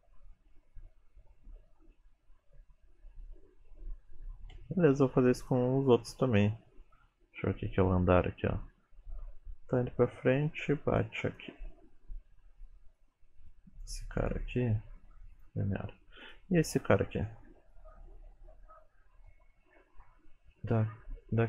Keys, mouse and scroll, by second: 4.6 space, 5.5 click, 7.0 click, 11.4 click, 12.7 click, 13.6 click, 14.3 right click, 16.3 click, 17.8 click.